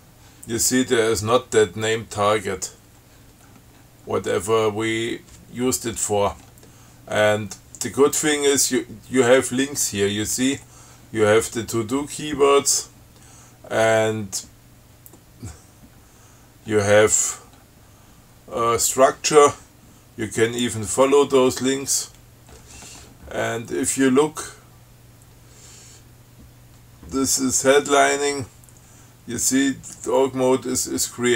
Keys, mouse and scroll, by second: 3.7 scroll up 2, 5.1-5.5 scroll up 2, 6.6-6.9 scroll up 2, 13.1-13.5 scroll down 2, 14.1 scroll down 2, 15.4-16.9 scroll down 8, 16.9-18.2 scroll up 5, 20.8 click, 22.8-23.8 scroll up 2.